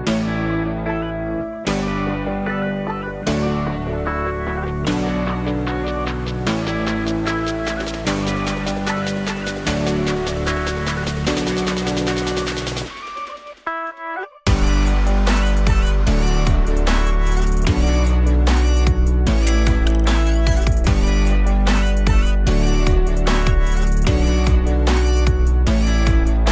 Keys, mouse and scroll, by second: 0.0 KP_3, 1.1 shift+d, 2.3-3.5 alt+middle drag, 3.5 r, 14.7-15.8 alt+drag, 15.8 scroll down 1, 16.8-18.0 drag, 18.0 KP_0, 21.5 click, 24.0-24.5 scroll down 1, 24.5-24.9 alt+drag, 24.9-25.4 alt+middle drag, 25.4-26.0 scroll up 3, 26.0-26.3 alt+middle drag, 26.3-26.5 alt+drag.